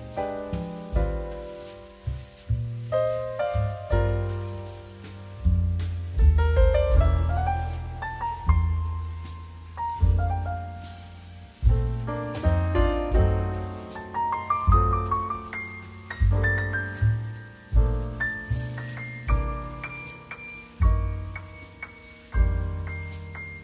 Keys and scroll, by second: 0.0 q, 3.7 space, 4.9 2, 7.3 d, 9.1 z, 10.7 z, 14.1 i, 15.4 m, 17.6 space, 20.5 q.